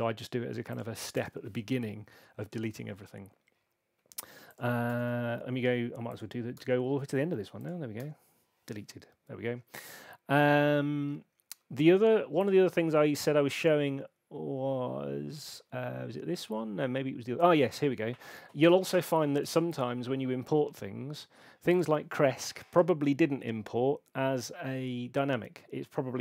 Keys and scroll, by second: 4.8 BackSpace.